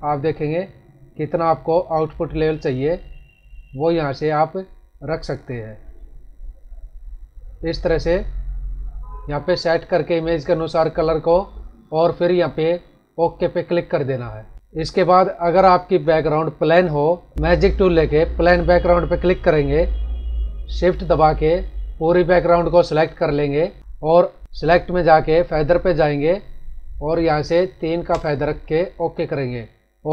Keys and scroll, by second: 14.5 ctrl+-, 15.5 ctrl+=, 23.8 ctrl+-.